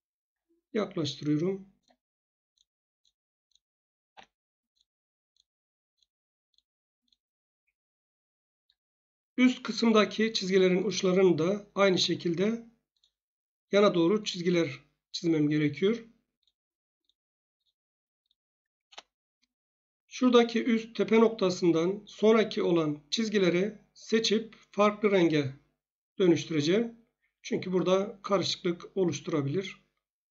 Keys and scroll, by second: 4.0 F8, 18.8 Return.